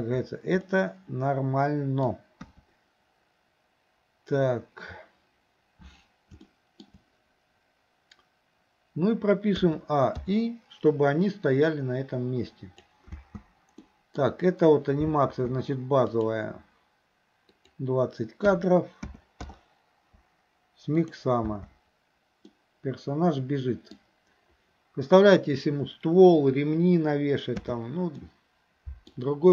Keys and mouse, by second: 0.7-2.1 middle drag, 2.4 KP_1, 6.5-6.9 shift+middle drag, 9.7 a, 10.3 i, 11.8-12.9 drag, 13.2 space, 13.9 middle drag, 16.2 click, 17.7-19.5 drag, 21.0 click, 21.5 space, 22.5-24.0 middle drag, 27.6 space, 28.2-29.2 middle drag.